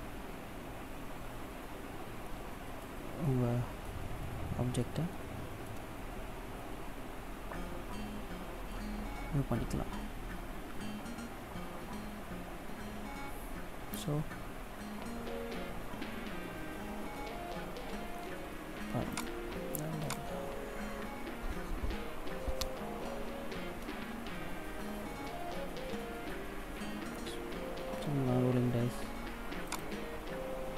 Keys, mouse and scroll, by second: 3.0 shift+middle click, 4.0 middle click, 4.9 shift+middle click, 6.4 shift+middle click, 15.6 scroll down 1, 18.9 click, 29.6 click.